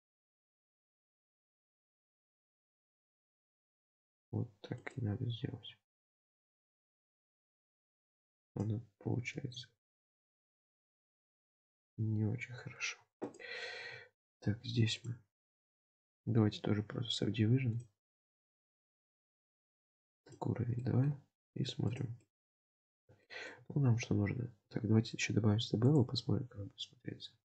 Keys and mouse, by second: 2.0 ctrl+r, 9.3 g, 12.4 Tab, 13.8 Tab, 15.1-16.9 drag, 17.8-18.8 drag, 20.2 click, 20.8 shift+middle click, 21.9 click, 22.2-23.5 middle drag, 24.1 Tab, 24.7 Tab, 26.0-27.5 drag.